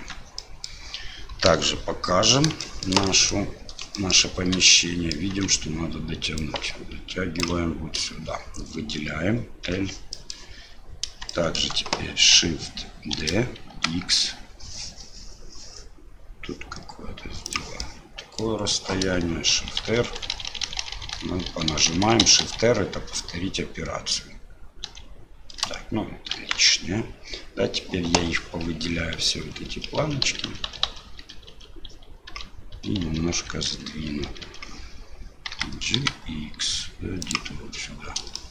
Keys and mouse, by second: 0.4 click, 2.6 shift+drag, 3.0 drag, 3.9 shift+drag, 4.8-5.1 middle drag, 5.3 Tab, 6.4-7.4 ctrl+drag, 9.7 l, 10.2 click, 11.4 shift+click, 13.1 shift+d, 17.9 click, 19.6-25.6 shift+r, 26.6 ctrl+z, 28.3-31.2 typing, 32.7 l, 33.0 l, 33.3 l, 34.1 l, 35.5 g, 38.4 shift+middle click.